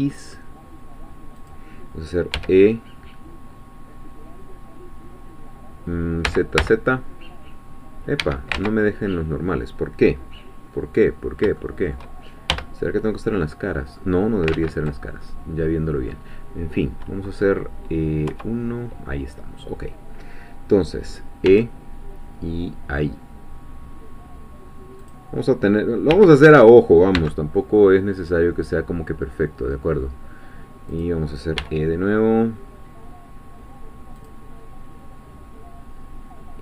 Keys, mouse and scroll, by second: 1.4 click, 2.3 e, 6.3 z, 8.2 Escape, 8.6 ctrl+z, 9.3-10.1 scroll down 2, 10.1-10.9 scroll up 2, 10.9-11.4 scroll up 1, 11.6 shift+middle click, 12.5 shift+3, 13.4-14.5 middle drag, 14.5 ctrl+z, 15.2 ctrl+middle click, 16.1-18.3 drag, 18.3 3, 21.5 e, 25.0 click, 26.1 r, 27.2 x, 30.9 click, 31.6 e, 34.2-36.6 drag.